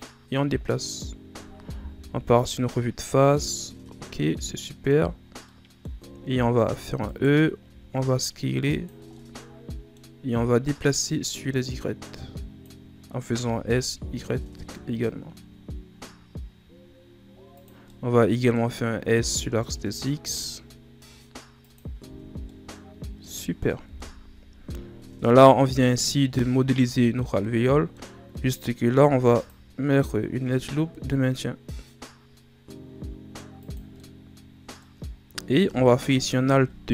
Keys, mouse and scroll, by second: 2.0 KP_1, 3.3 shift+scroll down 3, 4.6 middle click, 5.0-5.4 scroll up 2, 5.4 middle click, 6.0-6.6 shift+scroll up 1, 6.6 e, 9.1-10.9 middle drag, 10.9-13.3 drag, 13.3 s, 17.8-19.1 middle drag, 19.1 s, 22.0 Tab, 22.3 scroll down 1, 22.4-23.8 middle drag, 23.8 KP_1, 25.0 scroll down 4, 25.3 middle click, 25.7-26.0 scroll up 5, 26.3 middle click, 27.0 Tab, 27.4-28.9 middle drag, 28.9 ctrl+r, 34.0-35.1 middle drag, 35.1-36.1 shift+scroll up 1, 36.1 alt+right click.